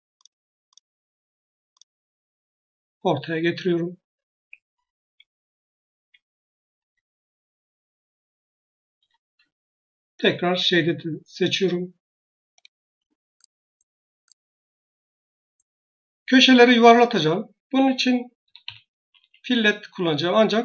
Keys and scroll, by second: 4.2 Escape, 18.3 typing.